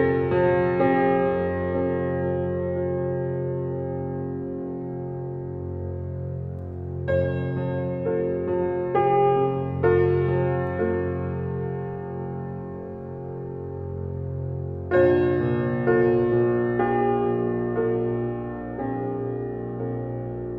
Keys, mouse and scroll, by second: 5.7 scroll up 1, 6.2-8.1 scroll down 1, 10.0-11.8 scroll up 1, 13.0 click, 16.4 click, 17.7 scroll up 1.